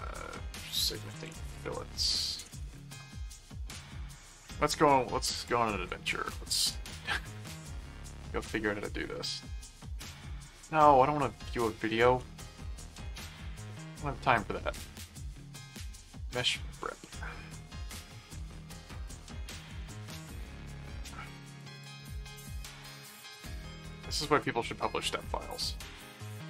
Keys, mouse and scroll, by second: 0.0-3.2 typing, 3.4 click, 5.3 click, 5.9 ctrl+shift+Tab, 6.5 ctrl+w, 10.8 s, 12.0 ctrl+shift+t, 12.8 ctrl+shift+Tab, 12.9 w, 15.8 middle click, 19.0 click, 19.7 ctrl+w, 21.6 click, 23.2 Tab.